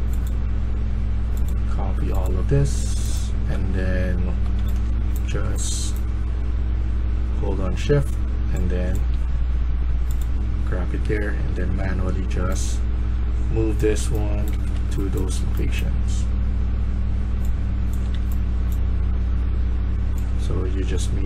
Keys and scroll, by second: 3.7-5.2 typing, 10.2-11.4 a, 13.5-14.9 typing, 18.0-19.2 typing.